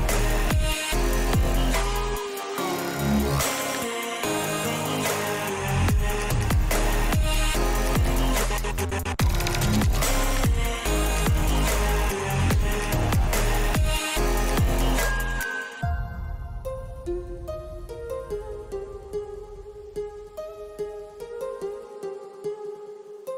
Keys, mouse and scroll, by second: 1.6 s, 4.4 g, 5.7 g, 7.2 click, 8.2 click, 10.1 s, 13.2 shift+middle click, 13.8-15.0 shift+middle drag, 15.0 click, 16.2 r, 19.1 middle click, 20.7 g, 22.1 middle click, 22.7 middle click, 23.1 click.